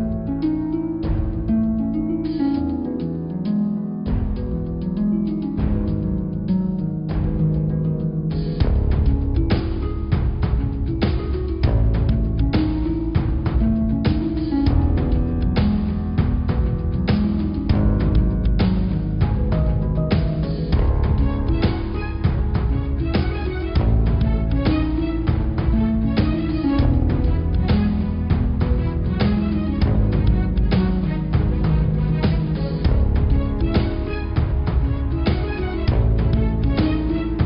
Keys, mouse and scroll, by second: 1.7 s, 5.2 click, 5.4-7.1 middle drag, 7.1-7.6 scroll up 3, 7.6-9.9 middle drag, 10.1-11.3 middle drag, 11.3 shift+a, 13.5-14.0 scroll down 10, 14.0-15.1 middle drag, 15.1 r, 18.2 click, 19.1 r, 20.9 middle click, 21.8 s, 23.0-23.7 scroll up 9, 24.0 s.